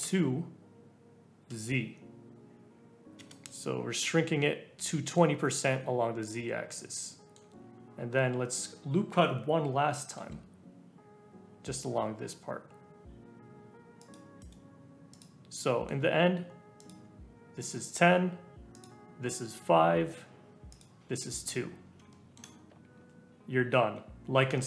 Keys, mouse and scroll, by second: 3.8-4.4 scroll up 1, 4.4-4.9 scroll up 1, 4.9-6.2 middle drag, 6.2 click, 7.0-8.2 middle drag, 10.1 ctrl+r, 15.1 click, 15.6-16.7 shift+middle drag, 16.7 alt+click, 18.7 alt+click, 20.7 alt+click, 21.8-22.1 scroll up 1, 22.1 shift+middle click, 22.8-23.3 scroll down 2, 23.3 shift+middle click, 23.4-24.6 scroll up 1.